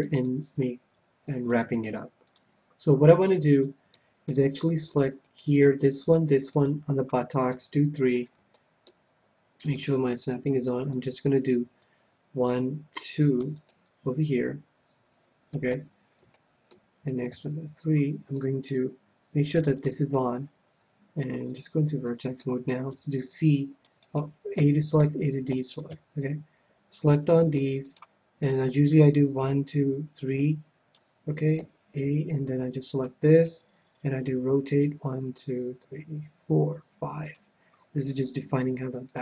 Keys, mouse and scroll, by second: 2.3-5.2 drag, 3.9-5.6 middle drag, 5.4-8.3 right drag, 7.5 KP_3, 8.1-10.2 middle drag, 9.6-13.5 drag, 13.9-15.4 middle drag, 16.3-23.9 middle drag, 16.3 a, 17.3 KP_3, 19.7-23.4 drag, 22.9 c, 24.1-26.1 right drag, 24.6 a, 25.0 a, 25.5 a, 25.9 c, 28.0-29.7 right drag, 28.7-30.4 drag, 31.6 a, 32.0 c, 33.3-35.4 right drag, 34.3 r, 37.4-39.0 drag, 37.7-39.2 middle drag.